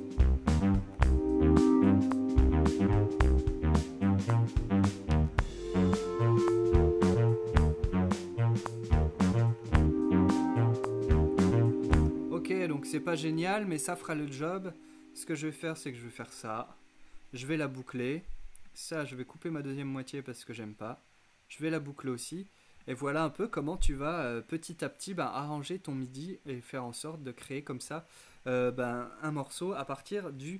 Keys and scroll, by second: 0.8-1.5 typing, 5.1-5.9 typing, 9.4-10.3 typing, 12.0 space.